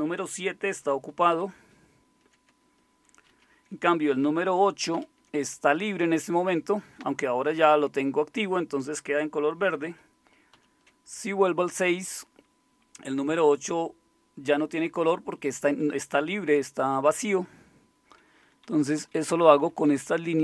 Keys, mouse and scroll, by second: 1.3 super+7, 3.3 super+6, 4.9 super+8, 10.5 super+6, 18.4 Down, 18.6 Down, 18.8 Down, 18.9 Down, 19.3 Up, 19.5 Up, 19.7 Up, 19.8 Up.